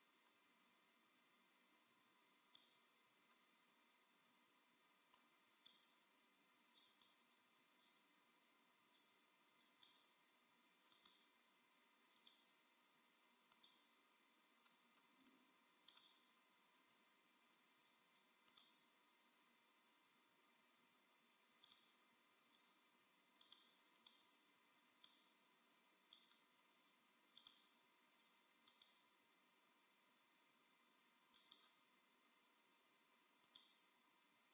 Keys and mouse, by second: 3.1-6.9 middle drag, 4.1 a, 4.7 b, 6.9-8.5 drag, 10.9-13.8 right drag, 12.9 x, 14.5-15.6 middle drag, 17.7 ctrl+r, 21.7-23.4 drag, 23.4-25.6 right drag, 25.0-26.6 drag, 27.3-28.9 drag, 28.7-30.4 right drag, 30.4 e, 33.5-34.5 drag, 34.3 e.